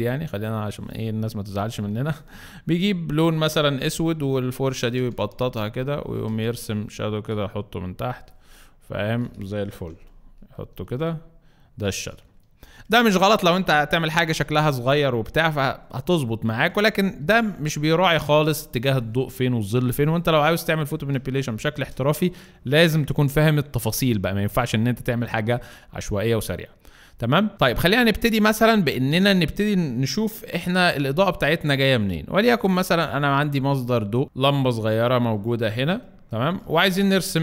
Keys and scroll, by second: 4.9 ], 5.1 ], 8.3 z, 9.7 v, 12.6 z, 14.3 z, 15.4 z, 16.7 space, 17.2 z, 21.3 space, 27.6 Delete, 30.6 b, 35.8 z, 36.6 space.